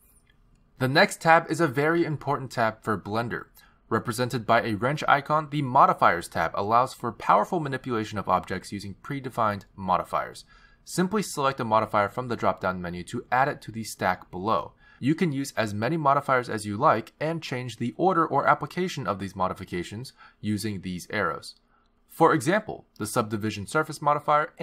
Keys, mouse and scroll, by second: 1.4 click, 6.7 click, 15.1 click, 18.2 click, 19.4 click, 20.2 click, 23.5 click, 24.2 click.